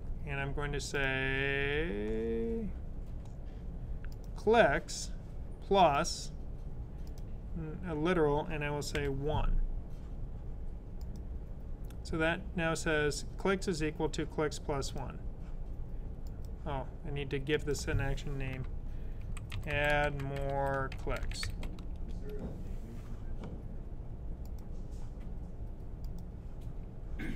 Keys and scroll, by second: 8.8 1, 10.9 typing, 18.8-22.0 typing.